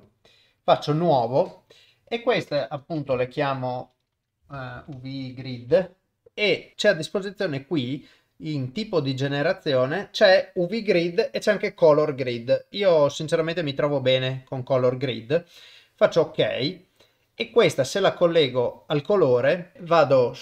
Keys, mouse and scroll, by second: 0.6-16.2 drag, 18.1 click.